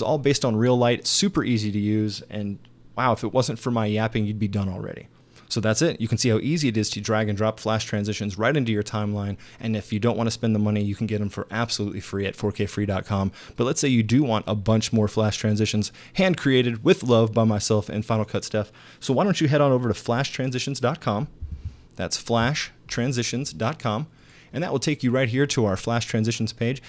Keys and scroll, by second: 21.5 super+Tab.